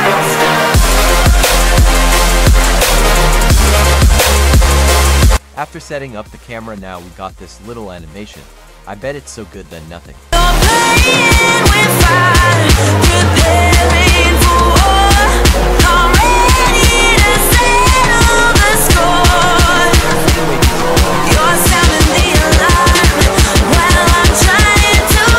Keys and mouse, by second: 1.4 click, 2.1 click, 2.4-9.7 typing, 6.0 click, 10.8-13.9 typing, 16.7-20.7 typing, 18.4 ctrl+z, 19.9 click, 21.2 click, 22.3 g, 22.9 click, 23.4 click, 23.6 g, 24.0 click.